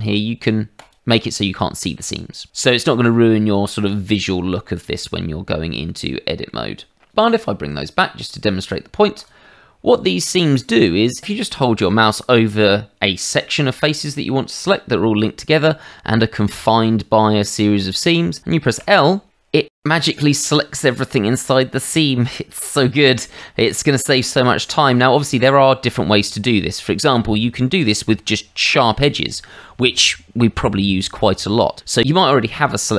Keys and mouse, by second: 0.8 click, 1.4 middle click, 5.0 middle click, 8.2 click, 9.1 click, 10.6 middle click, 11.1 shift+middle click, 16.2 middle click, 18.8 l, 19.3 middle click, 23.4 middle click, 24.1 shift+middle click, 24.6 middle click.